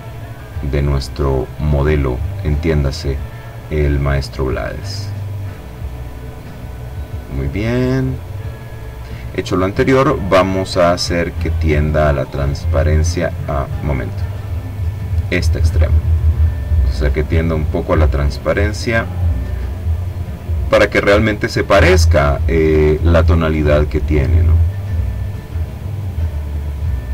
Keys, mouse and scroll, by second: 3.5-4.9 drag, 5.7-6.8 drag, 6.9-8.3 drag, 10.3-13.1 drag, 13.7 click, 15.1-16.5 drag, 16.6-17.7 drag, 18.6-20.1 middle drag, 21.5 click, 22.8-27.1 drag.